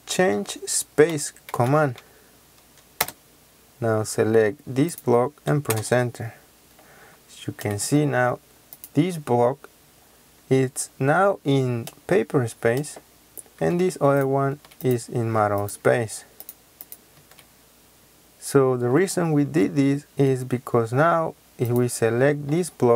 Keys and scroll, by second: 0.0-1.4 typing, 2.9 Return, 5.6 Return, 13.6 Escape, 14.4 Escape.